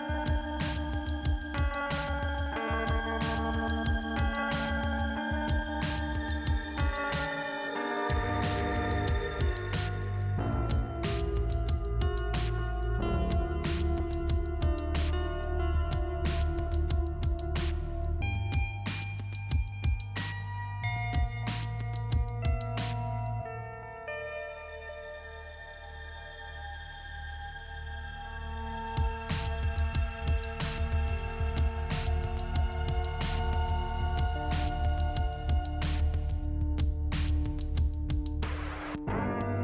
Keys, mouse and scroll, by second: 0.7 click, 0.7 click, 1.7 scroll up 1, 2.1 middle click, 2.7 scroll up 1, 3.0-3.4 scroll down 2, 4.6 middle click, 7.9 scroll up 2, 9.1 right click, 10.2 click, 12.4 click, 12.9 click, 13.0 click, 15.8 click, 15.8 click, 16.2 click, 16.3 click, 17.3 click, 17.4 click, 18.1 click, 18.3 click, 18.4 click, 18.5 click, 20.9 click, 21.0 click, 21.4 click, 22.1 click, 24.1 click, 24.2 click, 25.8 click, 26.0 click, 27.6 click, 28.4 click, 28.5 click, 29.4 click, 29.6 click, 30.1 click, 30.6 click, 30.7 click, 30.8 click, 31.6 click, 31.6 click, 32.4 click, 32.4 click, 32.5 click, 32.6 click, 35.0 click, 35.1 click, 36.0 click, 36.1 click, 36.3 click, 37.5 click, 37.6 click, 38.1 click, 39.3 click.